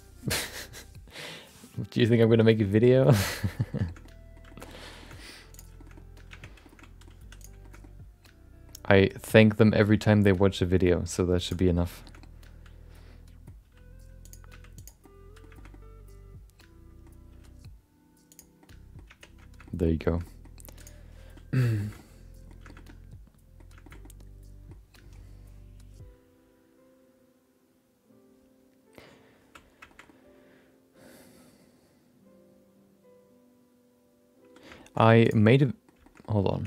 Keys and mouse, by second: 3.4 shift+middle click, 3.6 middle click, 3.9 shift+middle click, 4.0 middle click, 4.5 shift+middle click, 4.6 middle click, 5.0 shift+middle click, 5.1 middle click, 5.9 middle click, 6.3 Tab, 6.6 middle click, 6.8 middle click, 7.2 3, 7.4 click, 7.6 shift+middle click, 7.8 middle click, 9.2 middle click, 9.9 g, 11.6 middle click, 12.0 shift+middle click, 12.2-13.4 middle drag, 13.6 r, 14.7 g, 15.0 middle click, 15.5 shift+middle click, 15.7-17.0 middle drag, 17.3 r, 18.6 middle click, 19.3 Tab, 19.6 middle click, 20.0 shift+middle click, 20.2 middle click, 20.7 click, 21.3 middle click, 21.7 shift+middle click, 21.9 middle click, 22.6 shift+middle click, 22.8 middle click, 23.8 shift+middle click, 24.0 middle click, 29.8 shift+middle click, 30.1-34.5 middle drag, 34.7 shift+middle click, 35.6 middle click, 36.0 shift+middle click, 36.2 middle click, 36.5 Tab.